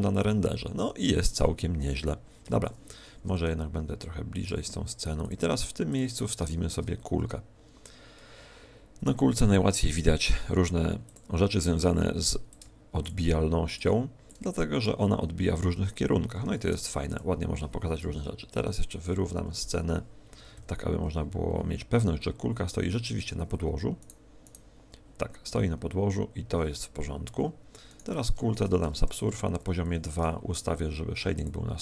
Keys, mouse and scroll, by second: 2.4 Escape, 5.2 click, 5.8 click, 12.4 click, 13.0 ctrl+click, 14.2 click, 17.1 s, 18.0 KP_1, 19.0 z, 19.4 KP_5, 21.4-21.8 scroll up 2, 22.4-23.4 scroll up 7, 24.0 right click, 27.8 right click, 29.0 ctrl+2, 30.2 t, 31.3 click.